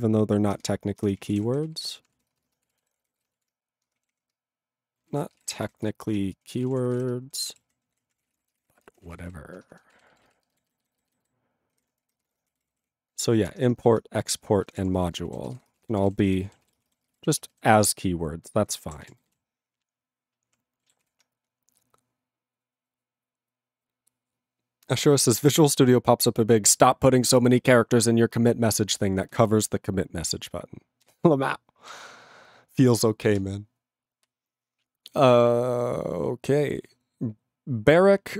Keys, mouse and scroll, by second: 0.6 Return, 0.8-10.9 typing, 11.7 alt+f, 12.1-13.3 typing, 14.4-15.5 typing, 15.5 ctrl+g, 15.7 ctrl+space, 15.8 ctrl+a, 15.8 ctrl+p, 16.0 ctrl+g, 16.1 ctrl+n, 16.2 ctrl+e, 16.7 ctrl+s, 16.8 ctrl+space, 16.8 ctrl+a, 16.9 ctrl+p, 17.0 ctrl+g, 17.1 ctrl+e, 17.2 ctrl+n, 17.3 ctrl+e, 17.7 ctrl+s, 18.0 ctrl+n, 18.5 ctrl+n, 19.0 ctrl+s, 19.1 ctrl+n, 19.8 ctrl+p, 20.3 ctrl+p, 21.0 ctrl+s.